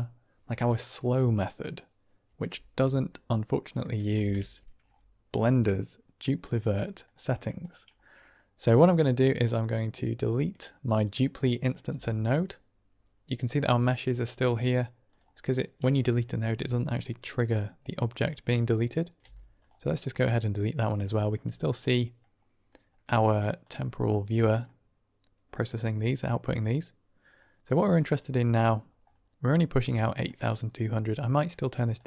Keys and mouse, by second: 4.1 ctrl+space, 6.1 middle click, 6.7 middle click, 7.6 middle click, 8.2 middle click, 11.8 x, 12.0 Delete, 17.5-18.1 drag, 19.1-19.6 typing, 20.1-20.9 drag, 21.1 shift+click, 21.6-22.1 middle drag, 22.6 middle drag, 23.6 click, 24.7-25.7 middle drag, 25.9 middle drag, 27.4 middle click, 28.0 click, 30.2 middle click, 31.3 middle click, 31.8-32.0 drag.